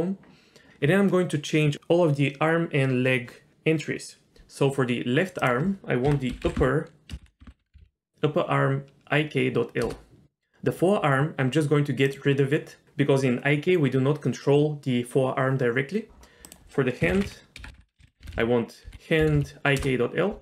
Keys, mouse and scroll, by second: 5.4-9.8 drag, 6.6 o, 7.2 BackSpace, 7.5 p, 7.8 Down, 12.1 click, 16.5-19.8 drag, 17.7 BackSpace, 17.8 BackSpace, 18.3 Down, 19.3 Down.